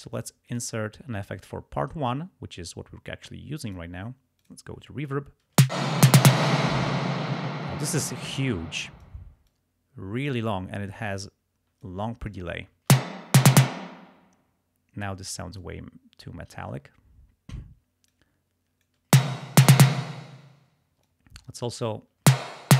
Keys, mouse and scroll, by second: 0.5 click, 3.6 click, 4.4 click, 5.5 space, 6.4 space, 8.4 click, 9.5-10.5 drag, 11.8 click, 12.9 space, 13.7 space, 15.6-16.7 drag, 18.1-19.1 drag, 19.1 space, 20.0 space, 21.0 click, 22.2 space.